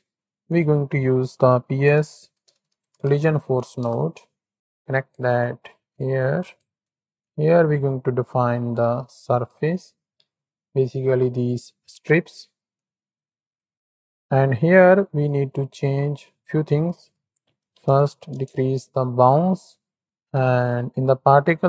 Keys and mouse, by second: 2.6 l, 4.6 click, 5.3 click, 6.4 click, 6.9 click, 7.3-9.7 drag, 10.1 Tab, 11.0 drag, 11.3 middle click, 12.8-13.6 drag, 13.9 click, 15.1 click, 17.0-18.3 drag, 20.0 click, 21.5 middle click.